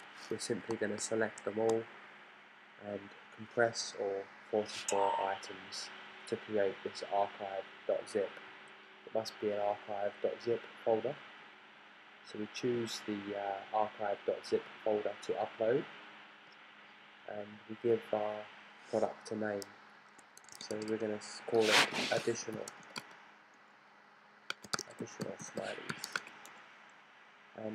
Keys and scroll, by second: 20.1-27.7 typing.